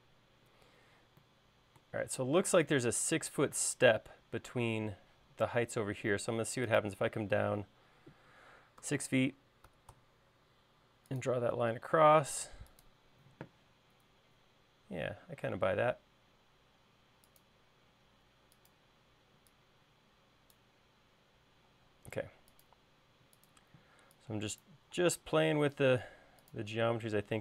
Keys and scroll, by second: 1.3 l, 9.4 6, 16.8-17.9 typing, 19.5 e, 22.4 l, 24.3 e, 25.6 l.